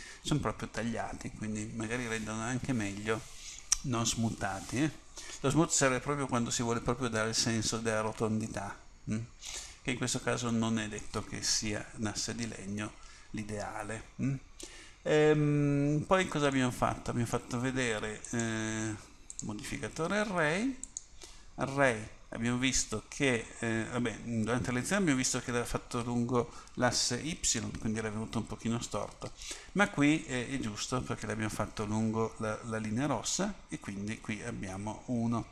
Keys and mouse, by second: 9.3 middle click, 11.8 KP_1, 18.4-25.5 drag.